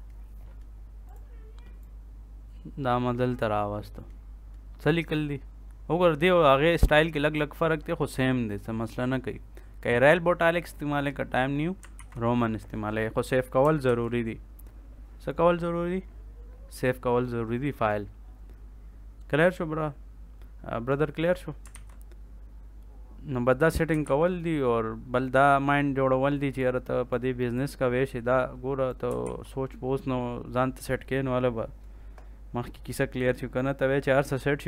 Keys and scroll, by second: 11.9 ctrl+s, 13.8 ctrl+s, 21.7 ctrl+s, 24.0 ctrl+s, 29.2 ctrl+s.